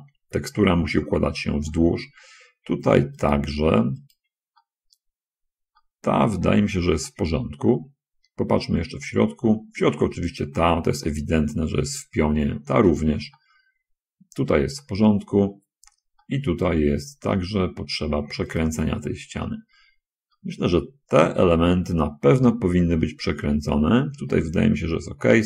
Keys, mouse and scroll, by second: 2.0 middle click, 4.4 shift+right click, 5.0 middle click, 6.2 middle click, 7.4 shift+middle click, 8.4-8.8 shift+scroll up 1, 8.8-9.9 middle drag, 10.7 shift+right click, 11.0-12.4 middle drag, 13.3 shift+middle click, 13.8 shift+middle click, 15.2-16.4 shift+middle drag, 16.6 middle click, 17.7 shift+middle click, 18.5 shift+right click, 19.8 middle click, 20.7 middle click, 22.3-23.6 middle drag, 24.2 middle click.